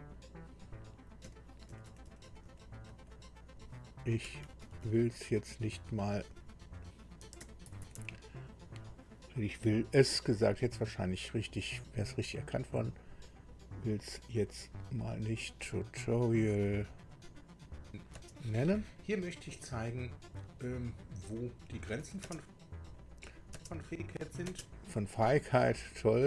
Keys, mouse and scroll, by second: 1.2 Left, 1.8 Delete, 2.0 Delete, 2.2 Delete, 2.4 Delete, 2.9 Delete, 4.2 Right, 4.6 Right, 5.4 Right, 6.1 Delete, 6.4 Delete, 6.5 Delete, 7.0-8.5 typing, 16.9 click, 17.7 click, 18.1 space, 22.9 click, 24.5 space, 26.0 click.